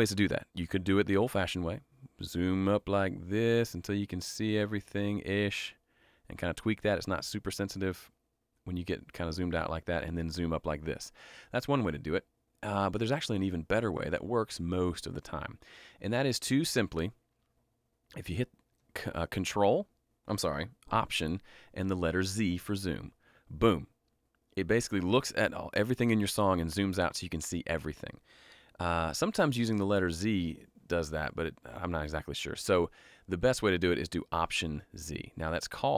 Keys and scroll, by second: 23.1 alt+z, 28.6 z.